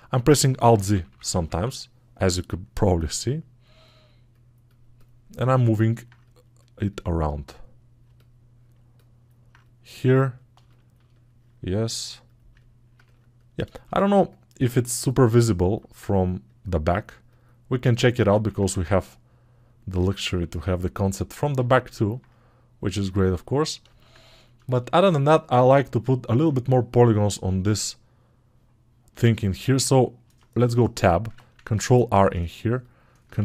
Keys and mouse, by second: 11.7 click, 13.0 ctrl+alt+right click, 22.0-31.7 right drag, 31.7-32.9 drag, 32.9-33.4 ctrl+middle drag.